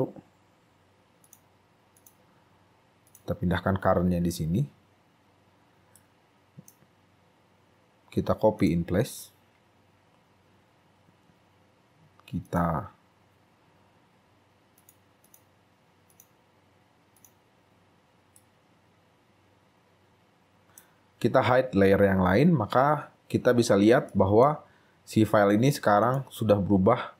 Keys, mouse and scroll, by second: 6.1 right click, 7.1-7.4 scroll up 3, 10.0 scroll down 3, 15.4 double click, 18.5 right click, 22.5 right click, 22.6 scroll up 3, 23.3 scroll up 2, 23.7 scroll down 2, 24.2 shift+right click, 25.0-25.4 scroll up 3.